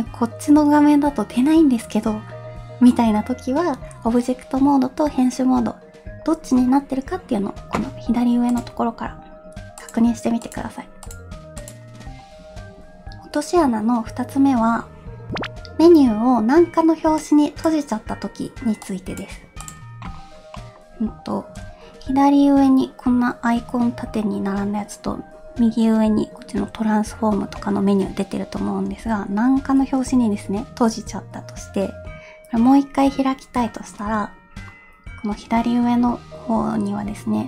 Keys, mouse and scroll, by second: 8.6-10.0 drag, 10.5 click, 11.1-11.8 drag, 20.5 middle click, 21.1 scroll down 1, 27.6-28.9 middle drag, 28.9 n, 29.6 t.